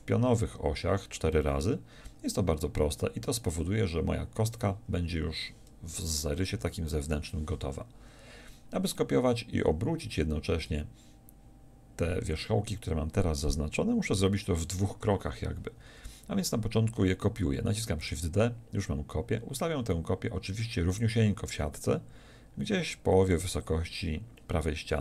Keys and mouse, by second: 6.5 KP_1, 18.0 shift+d, 23.5-25.0 drag.